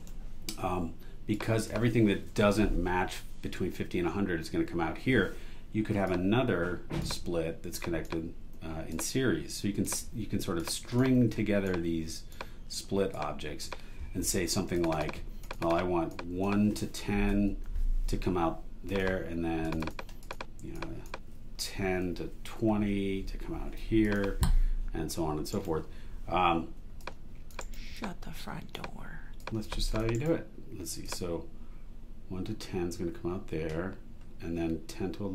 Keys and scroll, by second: 2.3 BackSpace, 17.1-18.1 typing, 21.7-23.8 typing, 25.5 super+e, 27.6 alt+super+e, 30.1 super+e.